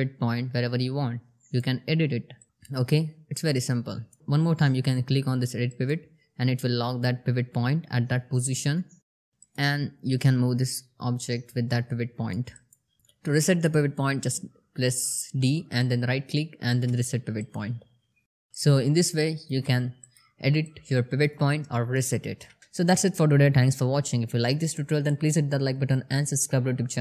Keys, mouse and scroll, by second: 5.1 click, 8.8-12.2 drag, 13.0 ctrl+z, 13.6-15.9 typing, 16.8 click, 17.9-19.1 alt+drag, 20.0-20.6 alt+click, 21.0-21.9 alt+middle drag, 22.5 alt+right click.